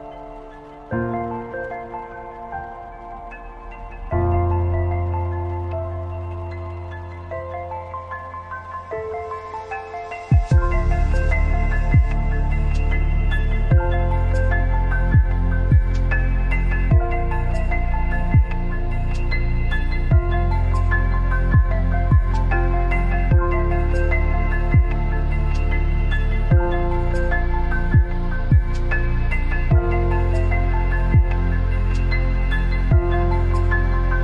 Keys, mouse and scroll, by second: 4.7-6.3 drag, 7.4 alt+scroll up 1, 8.3 scroll up 1, 12.1-20.7 drag, 26.6 alt+scroll down 1, 30.0 click, 30.9 Up, 32.1 Down.